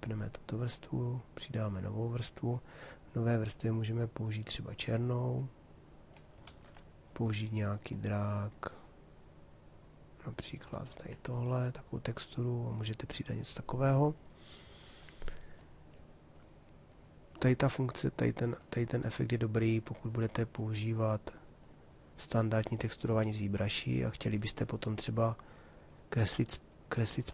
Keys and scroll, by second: 6.1 ctrl+z.